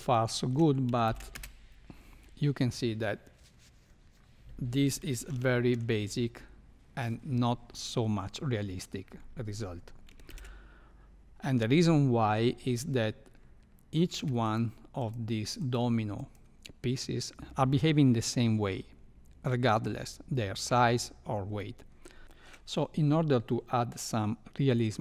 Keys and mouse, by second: 0.2 shift+middle click, 1.0 shift+Left, 1.3 space, 5.5 shift+middle click, 10.2 shift+Left, 14.1 space, 15.0 click, 16.1 click, 22.4 shift+middle click.